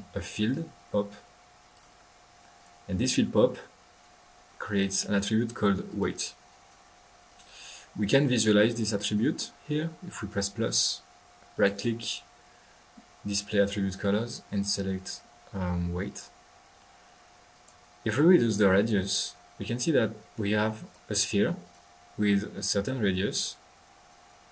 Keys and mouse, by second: 1.7 alt+f, 1.8 drag, 3.6 middle click, 4.2-4.6 typing, 4.4 middle click, 4.6 middle click, 4.6-4.9 drag, 5.9-6.3 drag, 6.5-7.0 drag, 8.9-9.3 drag, 10.3 click, 11.5 right click, 16.1 click, 16.3-16.7 typing, 17.5 click, 18.7-20.5 middle drag, 20.8 click, 21.6 drag, 22.3 middle click, 22.3-24.1 drag.